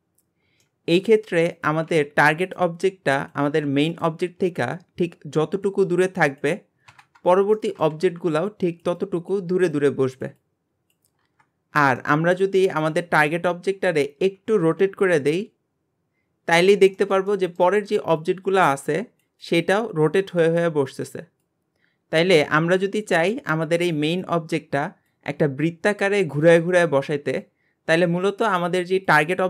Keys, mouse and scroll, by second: 0.0-0.6 scroll up 2, 0.6-1.5 shift+middle drag, 1.5 click, 3.2 click, 7.2-7.6 scroll down 2, 7.6-11.2 shift+middle drag, 11.7 scroll up 1, 12.0 shift+middle click, 12.6 scroll up 1, 13.2 click, 17.0-29.4 shift+middle drag.